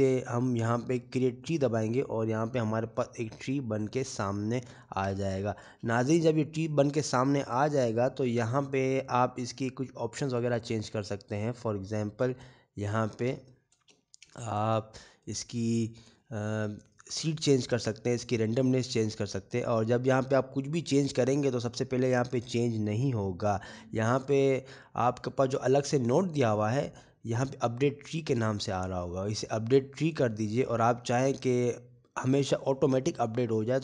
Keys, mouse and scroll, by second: 6.1 click, 6.1 scroll down 5, 7.3 shift+middle click, 8.2-8.8 scroll down 1, 8.8 scroll down 2, 8.9 middle click, 11.2 click, 12.7 scroll down 2, 14.2 click, 15.0-15.6 scroll down 3, 15.5 shift+middle click, 15.9 scroll up 3, 16.3 shift+middle click, 17.2 middle click, 18.5-18.8 scroll up 2, 20.1 click, 23.2 click, 26.7 middle click, 32.0 click.